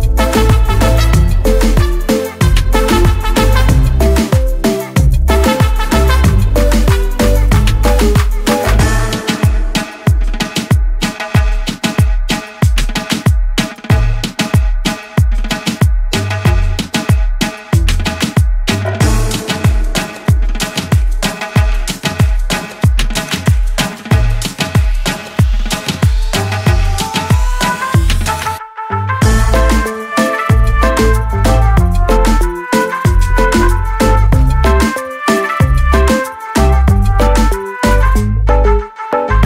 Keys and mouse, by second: 3.3 click, 5.1 click, 6.4 click, 9.4 click, 14.3 click, 18.9 click, 21.9 click, 23.5 click, 25.6 click, 26.9 click, 28.1 click, 29.6 click, 30.5 shift+Down, 30.6 shift+Down, 30.8 shift+Down, 31.0 shift+Down, 31.9 right click, 32.8 click, 34.1 click, 35.4 click, 36.7 click, 38.0 click.